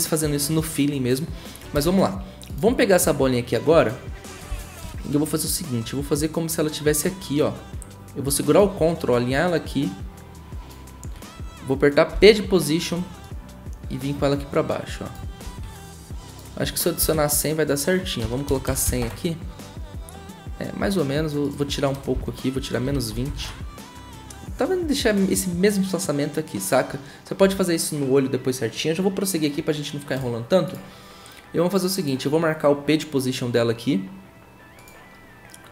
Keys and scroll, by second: 1.7 v, 12.1 p, 15.4 ctrl+z, 17.0 Right, 18.2-19.3 typing, 22.1 Right, 22.6-23.7 typing.